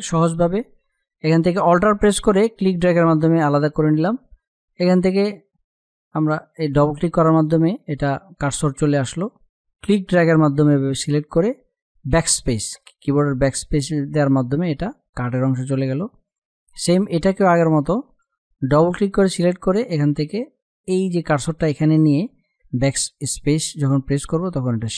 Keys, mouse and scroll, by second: 1.7-5.2 alt+drag, 10.0-11.5 drag, 11.5 BackSpace, 14.8 click, 21.0 click, 21.9 BackSpace, 24.1-24.9 drag.